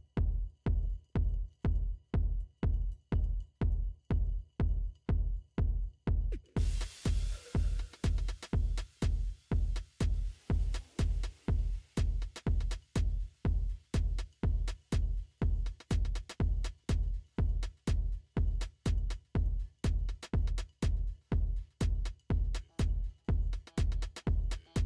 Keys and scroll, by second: 3.3 ctrl+space, 23.5 ctrl+0.